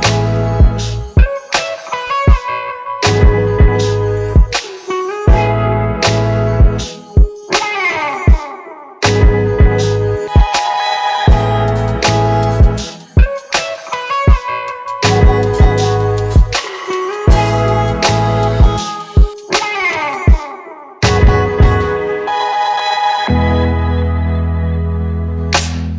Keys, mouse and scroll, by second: 15.0 alt+click, 20.5 right click, 22.0 double click.